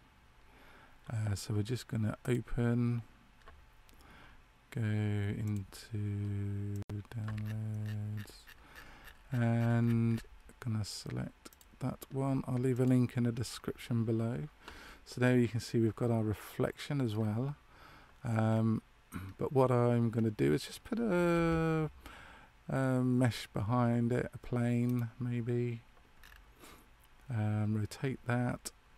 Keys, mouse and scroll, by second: 15.2 middle click, 18.5 scroll up 1, 20.1 scroll up 2, 20.2-20.8 scroll down 1, 21.3 shift+a, 26.2 scroll down 5.